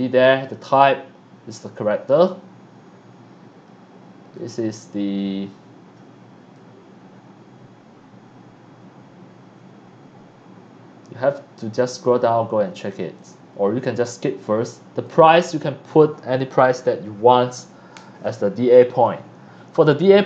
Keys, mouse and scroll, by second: 1.4 click, 2.1 click, 4.6 scroll down 1, 5.4 scroll down 1, 6.5-12.9 drag, 13.1 click, 15.0 click.